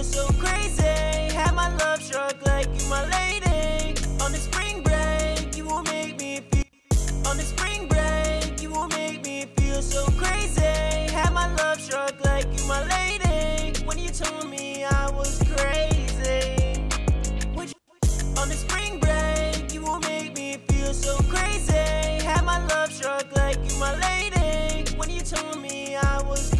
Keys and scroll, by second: 1.7 super+Tab, 5.2 super+Tab, 5.7-6.5 typing, 12.6 super+Tab, 13.3 super+`, 25.7 ctrl+super+s, 26.0 super+Tab.